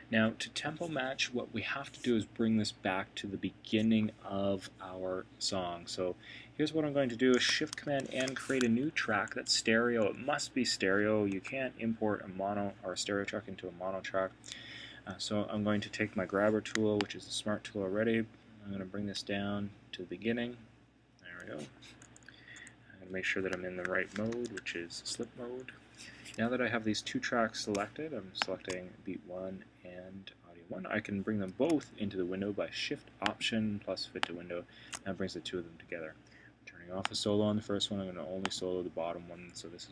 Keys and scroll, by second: 7.9 shift+super+n, 8.8 super+Right, 11.3 Return, 24.3 alt+2.